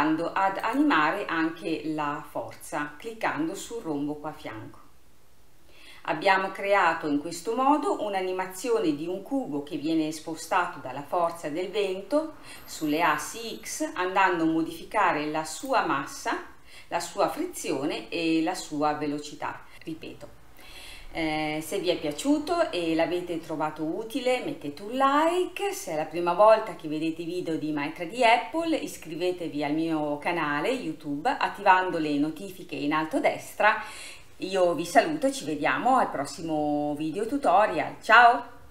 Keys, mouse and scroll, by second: 0.6 click, 14.9-15.7 scroll down 2, 15.7 click, 18.9-19.7 scroll down 1.